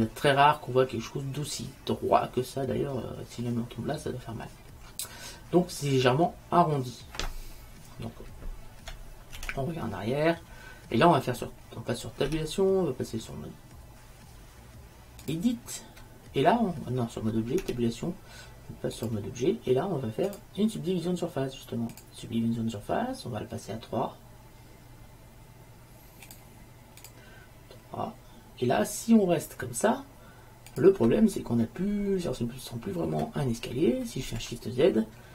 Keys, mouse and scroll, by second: 5.3 middle click, 9.6 shift+z, 12.4 Tab, 17.7 Tab, 20.4-22.1 drag, 26.4-28.9 drag, 30.8-32.7 drag, 34.5 shift+z.